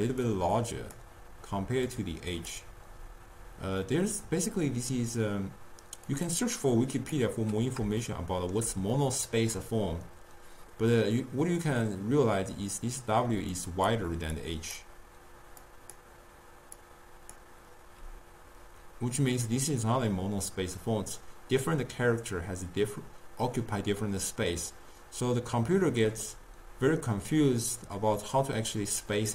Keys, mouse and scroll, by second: 0.1 d, 0.5 click, 1.1-1.8 d, 1.9-2.6 drag, 2.6-3.2 d, 6.3 click, 7.1 click, 8.4-11.2 shift+middle drag, 13.4-18.1 typing, 13.8 drag, 14.5 click, 15.7 click, 16.9 click, 26.4-29.2 middle drag, 29.2 click.